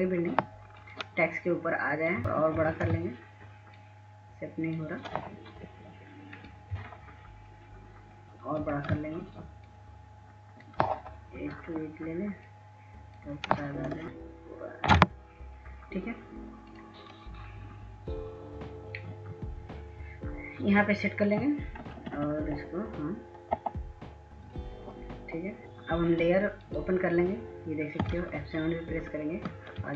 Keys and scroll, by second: 1.7 Left, 1.9 Right, 2.9 ctrl+t, 9.2 ctrl+t, 22.8 Right, 23.0 Right, 23.1 Right, 29.3 ctrl+s, 29.6 ctrl+s, 29.9 ctrl+s.